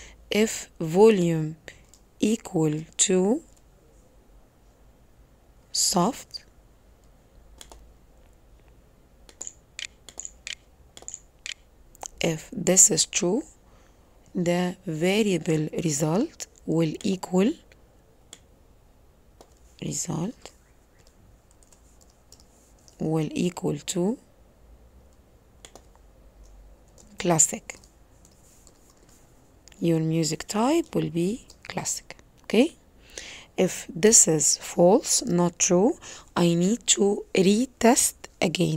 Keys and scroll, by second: 8.9-11.4 typing.